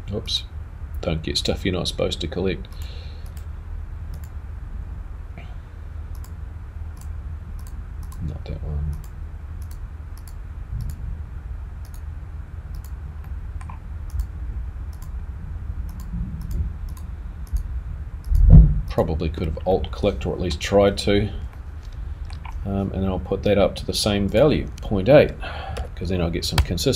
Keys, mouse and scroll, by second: 13.2 shift+click, 13.2 shift+middle click, 14.1 shift+click, 14.9 shift+click, 15.9 shift+click, 16.4 shift+click, 16.9 shift+click, 17.5 shift+click, 18.2 shift+click, 18.9 shift+click, 19.7 middle click, 20.7 scroll down 1, 21.5 middle click, 26.0 click.